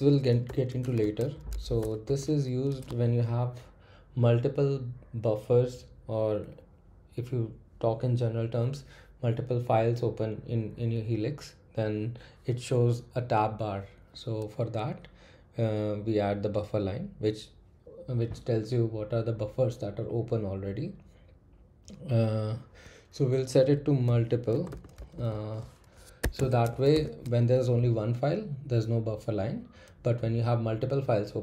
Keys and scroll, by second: 0.4-2.5 typing, 23.8-28.0 typing, 26.2 Escape.